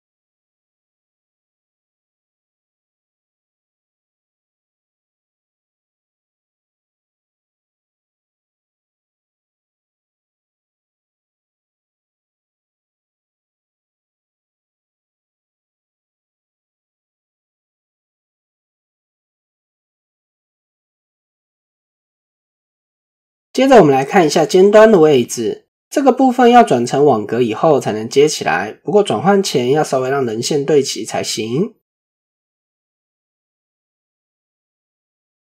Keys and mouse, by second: 2.8 click, 3.2-5.3 middle drag, 5.3 Tab, 5.5 middle drag, 7.5 shift+middle click, 9.0 Tab, 11.2 alt+s, 13.2 click, 17.6-19.1 drag, 19.3 click, 19.8 click, 20.4 shift+middle click, 21.2 click, 21.7 click, 22.5 Tab, 23.0 shift+middle click, 23.7-24.2 shift+middle drag, 27.6 Tab, 29.6-34.0 drag, 30.6 typing, 34.6-35.5 drag.